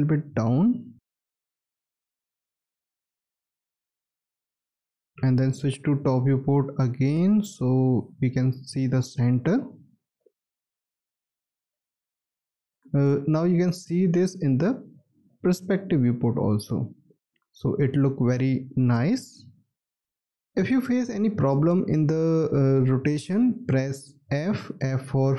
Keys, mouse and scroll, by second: 0.5-1.2 scroll up 1, 1.2 alt+middle click, 2.7-3.2 scroll up 1, 5.0 space, 6.3-7.7 scroll up 1, 7.7 alt+middle click, 8.2 middle click, 8.2-9.2 alt+scroll up 2, 9.2-10.0 scroll up 1, 12.8 space, 13.4 alt+click, 14.7-15.6 scroll up 1, 15.7 alt+middle click, 16.4-16.7 alt+scroll up 1, 17.2 alt+scroll down 1, 17.9 alt+click, 24.8 f.